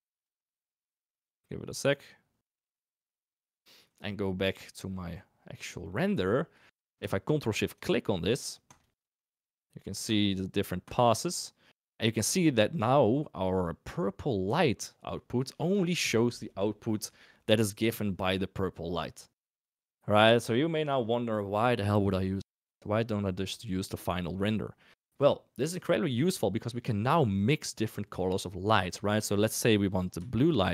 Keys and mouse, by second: 5.8 middle click, 7.7 ctrl+shift+click, 8.6 ctrl+shift+click, 10.1 ctrl+shift+click, 10.8 ctrl+shift+click, 13.5 click, 14.6 shift+click, 29.9 click, 30.5-30.7 shift+drag.